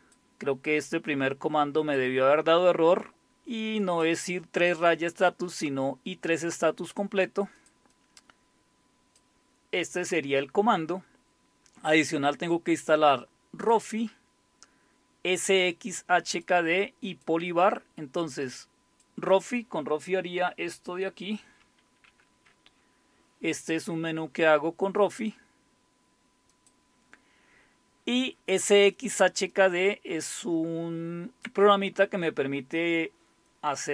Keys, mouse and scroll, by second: 0.0-2.7 drag, 3.8 click, 5.7-10.0 drag, 11.9-14.8 drag, 15.8-18.1 drag, 18.5-20.8 drag, 22.1 alt+super+r, 26.5 click, 29.5-32.1 drag.